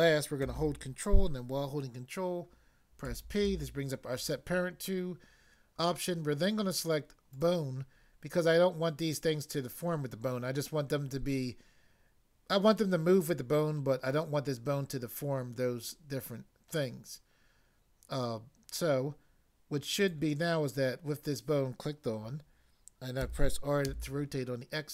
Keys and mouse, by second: 3.1 ctrl+p, 7.3 click, 20.0 click, 23.2 r, 23.9 x.